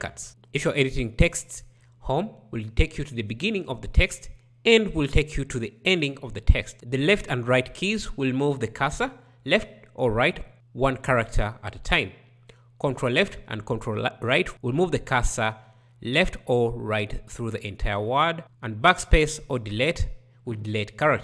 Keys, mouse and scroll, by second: 0.3 Home, 4.4 End.